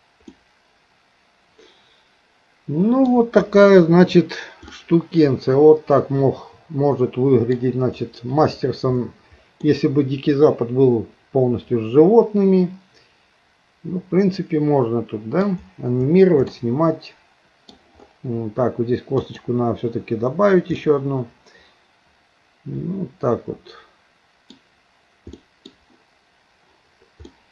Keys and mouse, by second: 0.4-3.1 middle drag, 4.8-7.5 middle drag, 9.7-15.4 middle drag, 16.6-17.7 middle drag, 19.2 click, 20.9-24.6 middle drag, 25.4 middle click, 27.3 middle click.